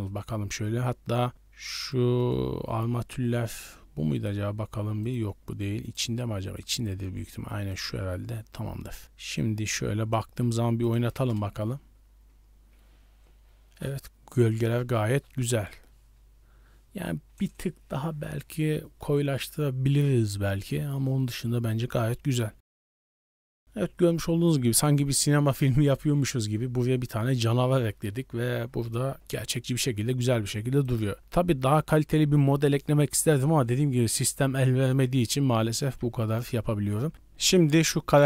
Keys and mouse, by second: 1.8 right click, 2.2 right click, 4.1 click, 5.0 click, 7.7 click, 9.5-10.2 drag, 10.7 click, 10.8 middle drag, 29.4 ctrl+space, 36.2 shift+middle drag.